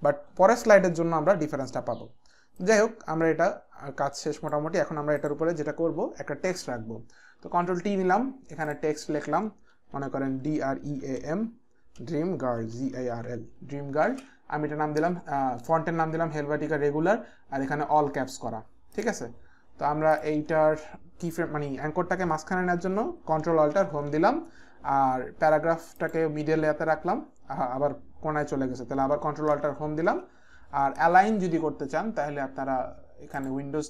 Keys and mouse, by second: 2.6 click, 5.2 click, 7.5 t, 8.6 click, 9.5-13.6 typing, 9.7 click, 14.1 ctrl+a, 18.9 click, 20.1 click, 23.7 ctrl+alt+Home, 23.7 click, 26.0 click, 29.0 click, 29.5 ctrl+alt+Home, 29.5 click, 33.3 click.